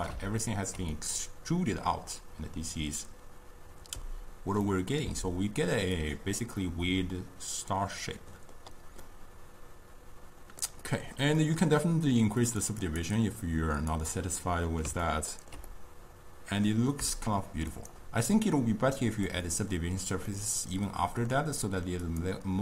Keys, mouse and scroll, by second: 0.5-4.0 ctrl+middle drag, 4.7-6.0 middle drag, 6.0 click, 6.7-12.5 middle drag, 12.5-15.1 drag, 15.1-17.8 ctrl+middle drag, 17.8-20.4 drag, 20.4-22.1 middle drag, 22.1 click.